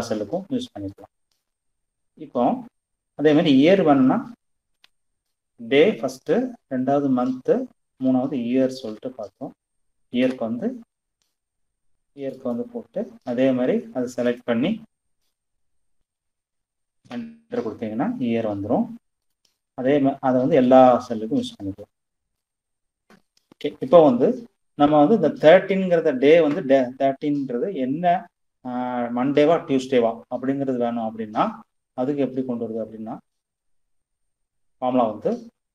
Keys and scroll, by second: 4.0 =, 7.2 y, 7.6 e, 8.0 r, 9.4 BackSpace, 15.1 shift+0, 16.2 Return, 35.2 =.